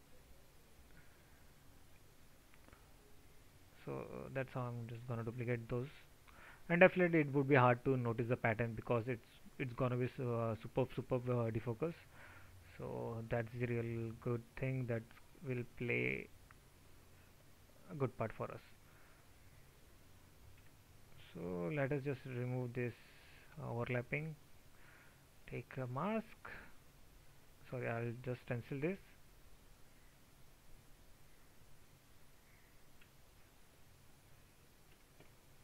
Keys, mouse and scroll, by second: 5.2 ctrl+z.